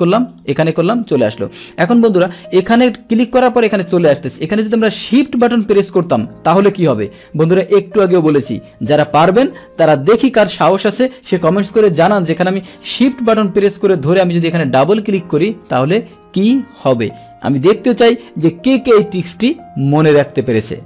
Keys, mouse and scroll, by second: 0.1 click, 1.0 click, 2.0 click, 3.1 click.